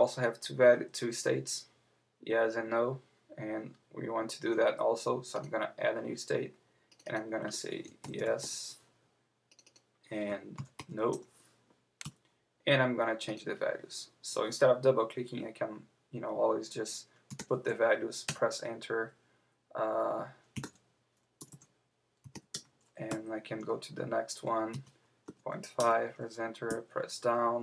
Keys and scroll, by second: 8.4 Return, 12.0 Return, 18.3 Return, 22.5 Return, 23.1 Right, 25.8 Return, 26.7 Down.